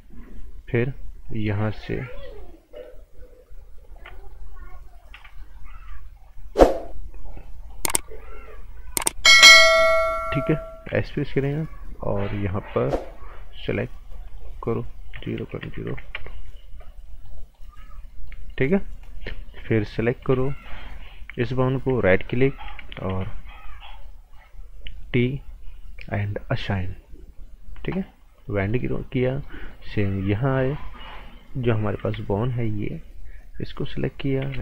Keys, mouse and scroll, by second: 0.7 click, 1.9 right click, 2.7 shift+click, 3.8 shift+click, 4.2 right click, 5.1 b, 5.4 right click, 6.1 shift+click, 6.6 right click, 7.6 click, 8.0 right click, 9.4 click, 11.1 s, 12.1 click, 15.1 KP_0, 15.4 KP_Decimal, 15.6 KP_0, 16.1 KP_Enter, 17.0 right click, 18.9 scroll up 1, 19.0 right click, 20.2 b, 20.6 click, 22.0 alt+right click, 23.1 g, 24.9 click, 28.7 right click, 32.0 b, 32.9 click, 33.6 right click, 34.4 g.